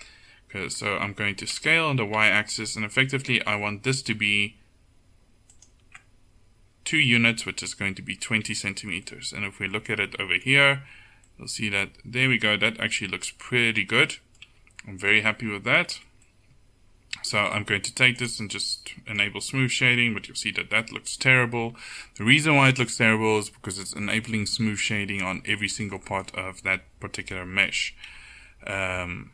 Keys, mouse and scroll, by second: 1.6 s, 8.5 Tab, 10.8 z, 14.5 Tab, 16.0 Tab, 21.8 Tab, 24.4 Tab, 28.2 KP_1.